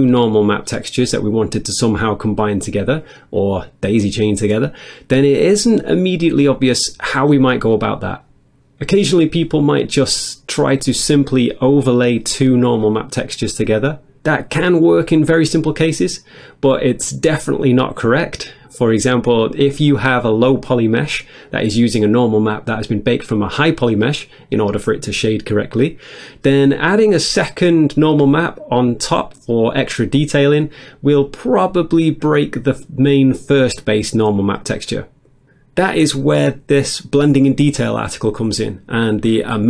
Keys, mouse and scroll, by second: 35.4 click, 37.3 click, 37.6 click.